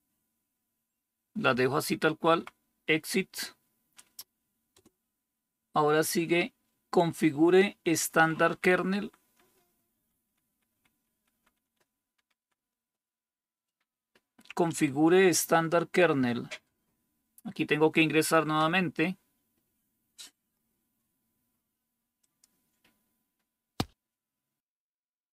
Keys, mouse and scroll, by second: 2.1 Tab, 2.3 Right, 4.6 Return, 8.0 Down, 8.2 Down, 8.5 Down, 8.9 Down, 9.1 Down, 9.9 Down, 10.1 Down, 10.4 Down, 10.6 Down, 10.8 Down, 11.0 Down, 11.2 Down, 11.4 Down, 14.2 Down, 14.6 Up, 18.5 Return.